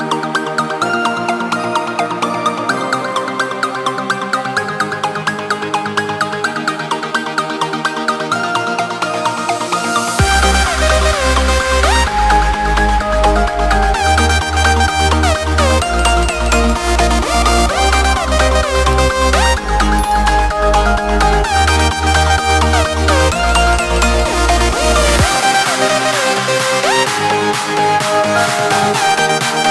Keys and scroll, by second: 5.7 ctrl+z, 8.2 ctrl+space.